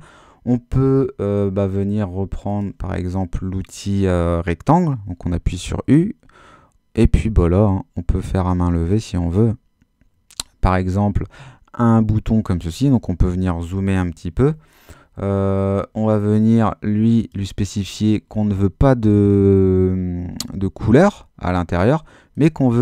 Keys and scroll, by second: 12.8 super++.